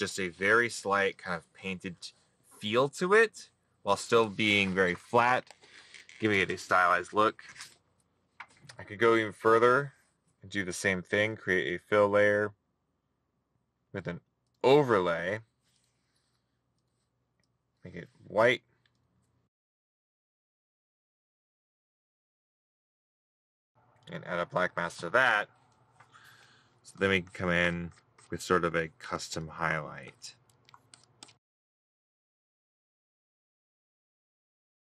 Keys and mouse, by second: 31.3 middle click, 31.8 middle click, 32.0 middle click, 32.2 middle click, 32.4 right click, 32.8 middle click, 34.6 middle click, 34.7 right click.